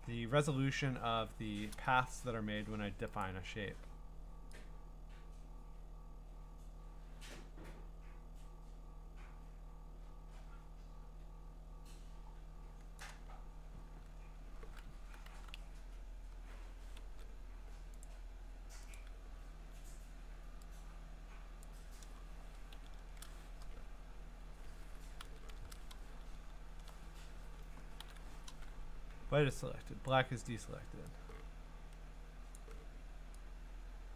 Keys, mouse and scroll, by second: 3.2 click, 13.0-14.8 drag, 14.9 scroll, 15.3 q, 16.3 q, 16.8 middle click, 17.0 ctrl+d, 18.0 click, 18.9 click, 21.6 click, 22.8 ctrl+i, 24.5 Escape, 25.2 ctrl+i, 26.2-27.3 ctrl+scroll, 28.0 ctrl+i, 30.1 click, 32.0 click, 32.5 click.